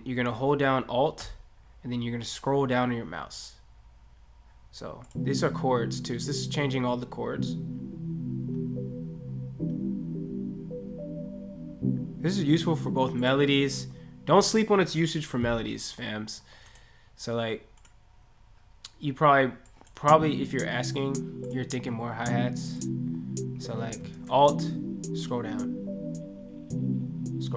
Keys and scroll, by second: 24.1 ctrl+a.